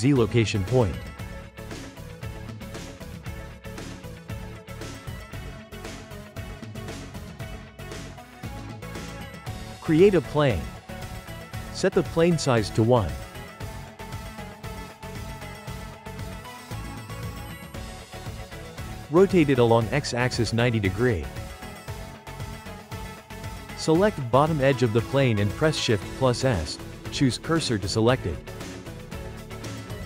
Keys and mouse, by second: 2.7 click, 4.7 click, 6.0 click, 6.7-7.0 ctrl+middle drag, 7.0 click, 7.7 click, 8.3 shift+a, 11.9-14.9 drag, 15.7 click, 16.9-17.7 ctrl+middle drag, 17.7 click, 17.9-19.3 middle drag, 19.3 r, 22.4-23.3 drag, 23.3-24.8 shift+middle drag, 24.8 Tab, 25.1 2, 25.5 click, 26.6 shift+s, 29.2 Tab, 29.8-30.0 right drag.